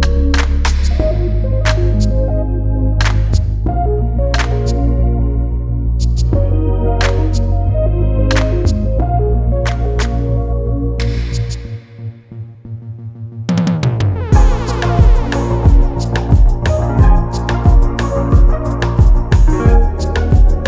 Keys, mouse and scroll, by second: 1.1 scroll down 1, 1.4 click, 1.9-2.6 scroll up 1, 2.6 click, 10.3 click, 18.2-18.7 scroll up 1, 18.7 click, 20.5 scroll down 1.